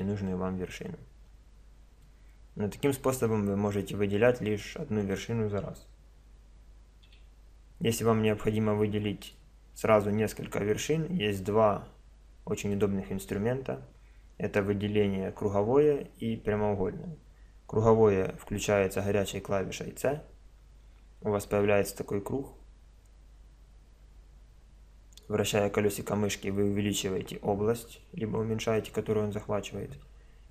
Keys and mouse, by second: 2.3 middle click, 7.1 a, 8.3 click, 8.5 middle click, 8.6-9.9 drag, 9.9 middle click, 10.1 click, 10.3 middle click, 10.7-13.9 middle drag, 20.1 c.